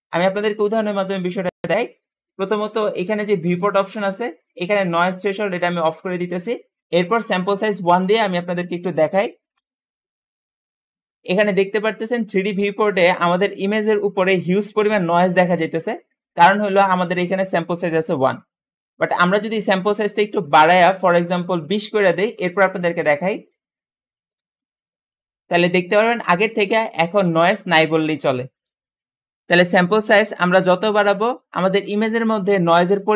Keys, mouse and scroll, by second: 3.3-6.4 drag, 6.8 Return, 6.8 4, 8.0-10.9 drag, 9.0 KP_1, 9.5 Return, 23.6-25.1 drag, 24.0-24.5 typing, 24.5 Return.